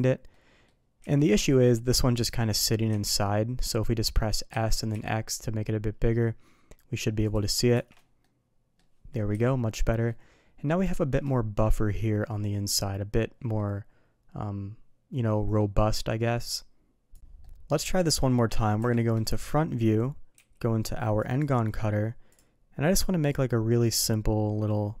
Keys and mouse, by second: 0.3-2.3 middle drag, 2.9 z, 3.2-3.6 middle drag, 4.1 middle drag, 4.5 s, 7.7 shift+2, 8.2-8.8 middle drag, 9.3 KP_3, 10.0-10.6 middle drag, 10.9 shift+middle click, 13.5-15.6 middle drag, 16.1 middle click, 17.4-17.9 middle drag, 18.8 KP_1, 20.3 d, 22.3 click, 23.3-25.0 drag.